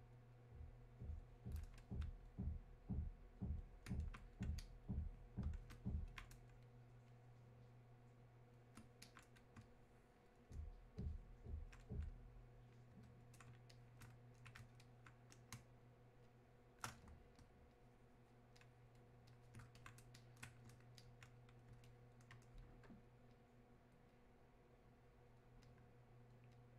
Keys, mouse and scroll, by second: 15.6 space, 16.3 click, 16.6 space, 17.4-26.7 shift+drag.